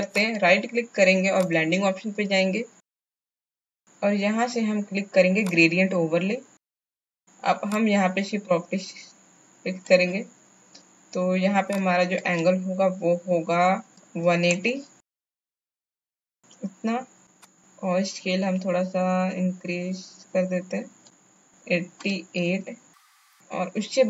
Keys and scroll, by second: 14.1 KP_1, 14.2 KP_8, 14.5 KP_0, 22.7 KP_8, 22.7 KP_8.